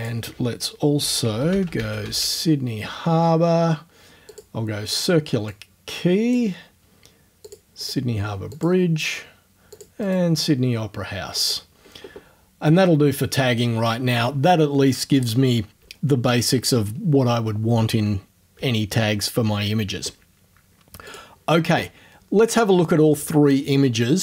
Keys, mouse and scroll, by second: 0.3 middle click, 0.8-2.7 typing, 4.3 click, 4.9 right click, 5.5-6.5 drag, 7.5 click, 7.8 right click, 8.5 click, 8.8 middle click, 8.8-9.5 scroll up 1, 9.5-10.3 scroll up 1, 9.8 click, 11.4 click, 21.1 click.